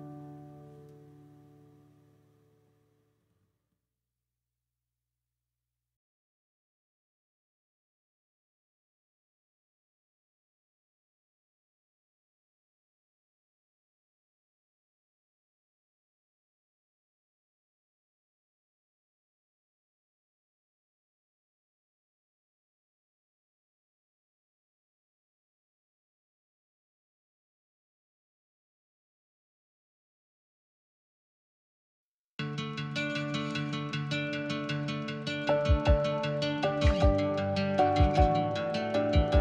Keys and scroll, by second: 0.1-4.2 typing, 8.9 Escape, 9.7 e, 12.7 Escape, 19.7 m, 21.7 l, 22.4 space, 25.1 p, 27.8 m, 29.5 Escape, 31.1 r, 32.3 Right, 32.6-35.9 typing, 36.9 ctrl+g, 38.6-39.4 typing.